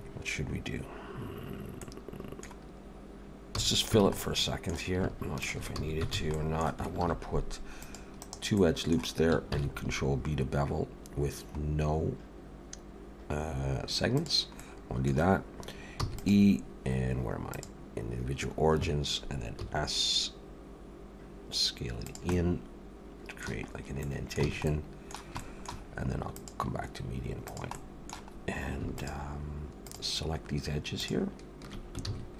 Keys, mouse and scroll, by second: 1.8 middle click, 3.5 f, 4.0 alt+a, 4.2 middle click, 5.4 alt+shift+click, 5.7 f, 6.1 alt+a, 6.3 middle click, 7.0 ctrl+r, 8.6 middle click, 9.5 ctrl+b, 14.6 middle click, 16.0 e, 17.5 click, 18.8 Escape, 19.6 s, 22.3 middle click, 23.7 scroll up 1, 24.0 middle click, 24.4 alt+a, 24.7 middle click, 25.4 shift+middle click, 26.3 click, 27.8 middle click, 28.3-28.8 scroll up 1, 29.0 alt+shift+click, 32.1 ctrl+z.